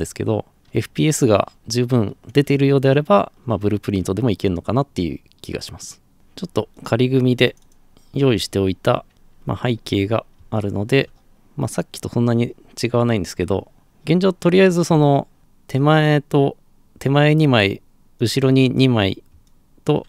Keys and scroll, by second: 9.1 alt+f.